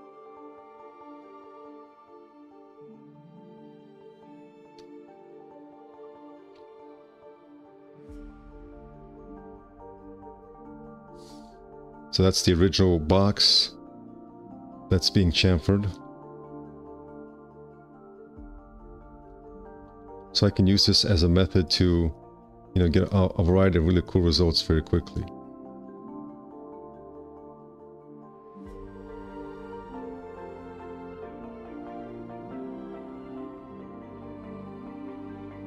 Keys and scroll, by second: 6.6 Return, 7.3 5, 7.9 Return, 10.2 KP_1, 10.5 Return, 12.2 F4, 16.7 F4, 18.1 q, 20.5 %, 22.5 w, 25.8 q, 26.2 w.